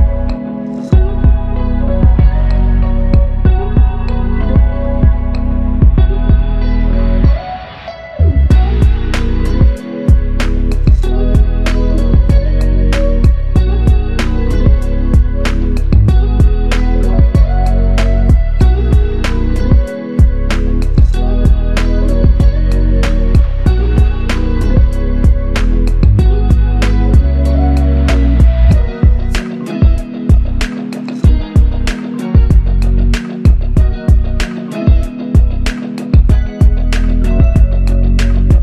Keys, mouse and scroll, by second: 4.6 alt+click, 9.6 alt+click, 11.0 alt+click, 13.3 ctrl+click, 17.6 ctrl+click, 18.6 ctrl+click, 22.6 w, 24.4 alt+click, 26.1 alt+click, 31.4 alt+click, 35.2 ctrl+z.